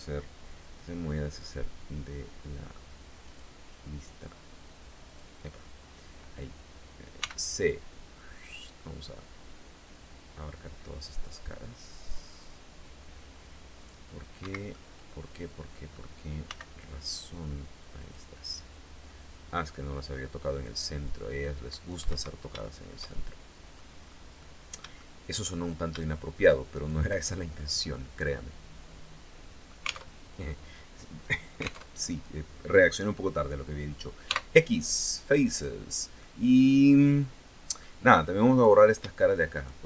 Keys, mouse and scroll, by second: 2.8 click, 4.6 click, 6.8 c, 7.2-13.6 drag, 14.0 Escape, 14.3-15.6 middle drag, 16.0 c, 16.4-17.8 drag, 18.3-20.4 drag, 20.6-21.6 drag, 21.6 Escape, 22.6 shift+middle click, 23.6 scroll down 2, 23.9-25.1 middle drag, 26.3 shift+right click, 26.8 shift+scroll down 2, 27.1-29.6 shift+middle drag, 29.6 alt+Tab, 31.4 alt+Tab, 33.8 x, 35.1 click, 35.8-37.6 middle drag, 38.0 right click, 39.1 shift+right click.